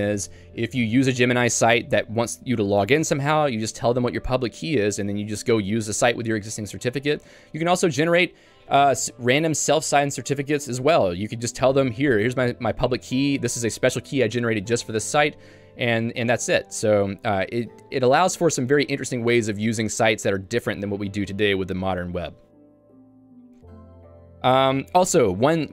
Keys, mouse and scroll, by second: 23.4 Escape, 23.9 j.